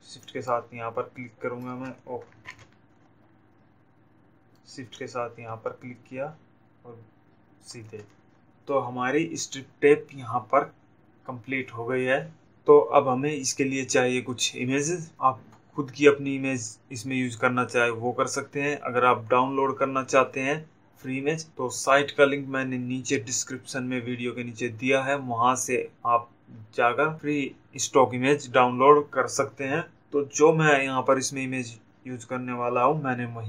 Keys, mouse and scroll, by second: 0.2 shift+click, 8.3 click.